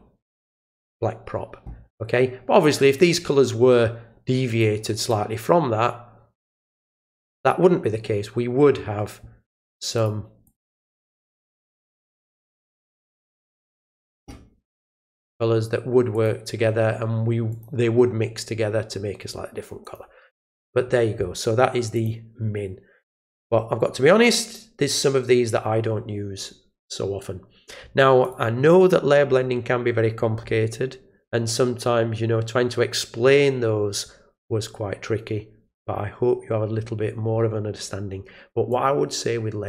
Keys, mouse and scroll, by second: 2.8 click, 4.4 click, 5.0 click, 7.3 click, 9.9 click, 10.4 click, 11.2 click, 11.8 click, 12.2 click, 12.7 click, 13.3 click, 13.6 click, 14.9 click, 16.1 click, 17.5 click, 19.8 click, 21.9 click, 28.2 click, 38.7-39.6 drag.